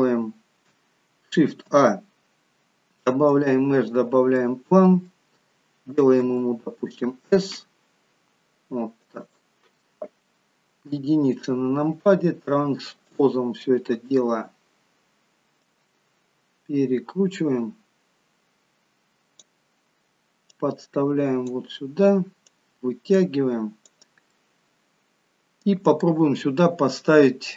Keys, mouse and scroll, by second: 1.6 shift+a, 4.3 middle click, 6.3 s, 10.9 KP_1, 13.1 click, 15.7 click, 20.6 click, 22.5 click, 24.5 middle click.